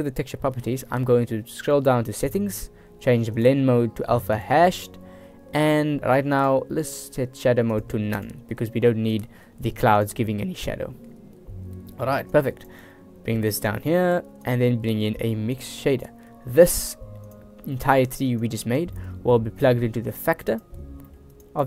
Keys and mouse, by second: 3.5-4.8 drag, 6.4-7.3 drag, 7.8-8.4 drag, 10.1 drag, 12.1 middle click, 12.4-12.8 drag, 13.0 g, 13.9 click, 14.3 shift+a, 17.4 click, 17.8 click, 18.5-18.9 drag, 19.7-21.5 drag.